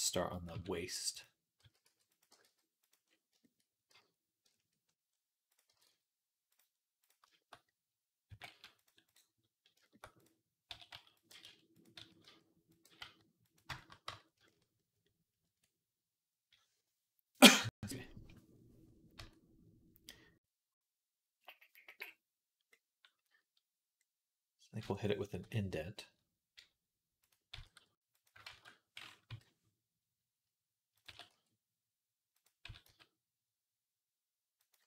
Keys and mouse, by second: 0.4 s, 1.5 s, 1.9 middle click, 2.1 g, 3.0 middle click, 3.3-4.9 shift+middle drag, 5.5-9.6 middle drag, 5.5 g, 8.1 g, 10.6 s, 11.1 g, 11.8 s, 12.7 g, 13.7-22.5 middle drag, 13.9 Tab, 15.3 Tab, 19.0 Tab, 22.6 middle click, 24.3-27.4 middle drag, 28.3 ctrl+z, 29.1 i, 30.9 s, 32.5 s.